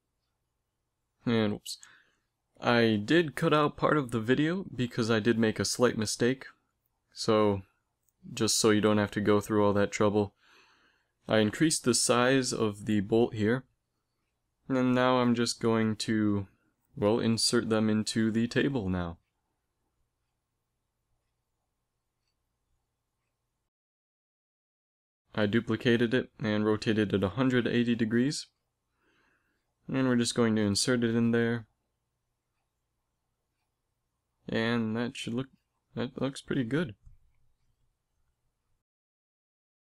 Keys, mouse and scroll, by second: 0.6 KP_1, 2.1 g, 2.1 x, 2.1 click, 3.5 middle click, 4.4 KP_1, 7.3 z, 7.6 z, 7.9 a, 8.5 b, 9.6 x, 12.4 right click, 13.5 KP_7, 16.3 shift+d, 20.1 g, 23.7 right click, 24.3 z, 24.6 click, 25.0 right click, 25.0 shift+d, 25.9 r, 28.6 g, 31.9 g, 36.1 a.